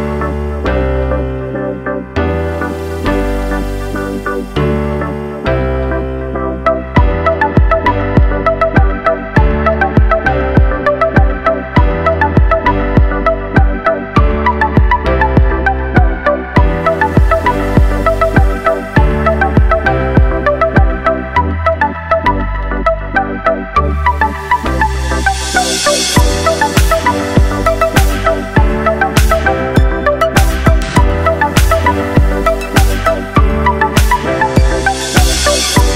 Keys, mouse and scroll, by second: 0.4 click, 1.0-1.4 middle drag, 1.4 click, 1.6 right click, 3.6 scroll down 2, 4.2-7.2 shift+middle drag, 7.2 click, 9.1-10.1 drag, 11.5-12.2 drag, 12.7 click, 13.9 click, 15.7 click, 16.1 click, 16.7-18.7 drag, 20.0-21.6 middle drag, 21.6 click, 22.2 shift+click, 22.9 shift+click, 24.0-26.1 drag, 26.8-28.8 middle drag, 29.1-30.9 shift+middle drag, 30.9 click, 31.2 shift+middle drag, 31.4-32.1 scroll up 2, 32.1 click, 34.4 click, 35.4-35.9 scroll down 7.